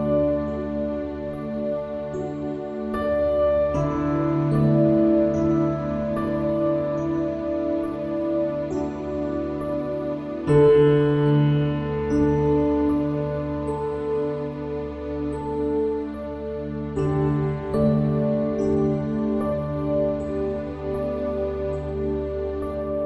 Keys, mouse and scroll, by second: 1.8 a, 3.1 KP_1, 5.7-7.6 drag, 8.1 middle click, 10.1-11.4 middle drag, 11.4 click, 14.2 Tab, 15.6 click.